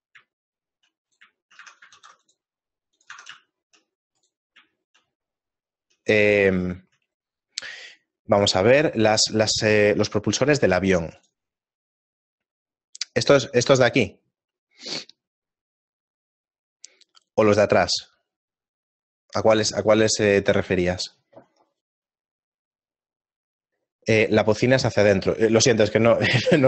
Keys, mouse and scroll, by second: 1.1 shift+middle click, 1.1 right click, 1.5 shift+middle click, 1.7 Tab, 2.2 ctrl+r, 3.2 Tab, 3.5 shift+middle click, 5.1 shift+middle click, 5.1 right click, 5.6 middle click, 6.2 shift+middle click.